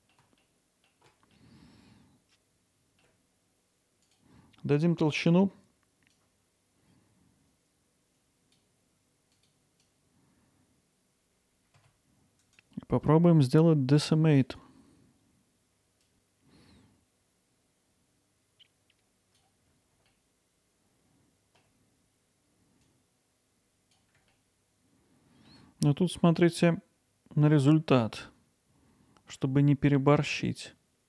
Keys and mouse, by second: 0.6 ctrl+alt+middle click, 1.4-3.0 alt+middle drag, 4.0-10.8 drag, 10.8 alt+middle drag, 11.8 a, 12.5-14.9 right drag, 16.1-20.0 drag, 23.0-24.2 drag, 24.7 alt+middle click, 26.5-27.8 drag, 30.3-31.0 drag.